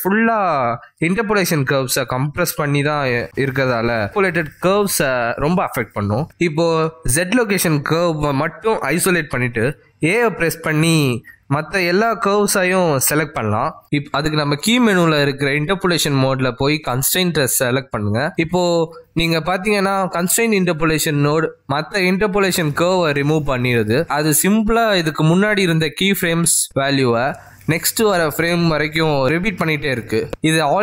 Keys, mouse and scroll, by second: 10.3 click, 11.3 shift+h, 13.1 a, 15.8 click.